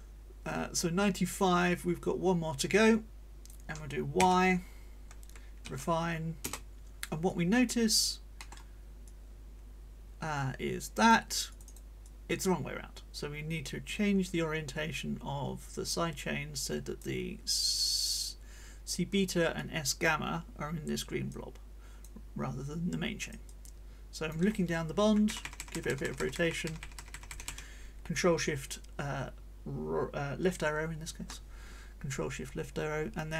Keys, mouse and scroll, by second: 3.7 scroll up 2, 4.1 y, 5.6 shift+r, 6.4 Return, 7.3 click, 8.4 click, 9.0-11.3 drag, 11.5 click, 12.0-17.2 drag, 19.5 click, 21.3 click, 23.2-24.5 drag, 25.3 ctrl+shift+Left, 32.1-33.3 drag.